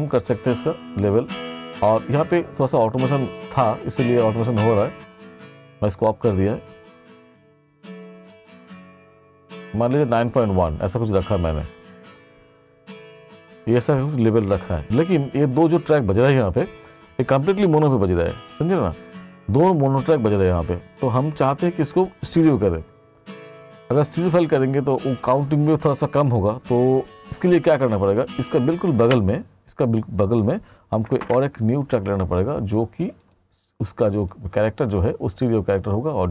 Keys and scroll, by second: 29.1 space, 31.3 ctrl+shift+n.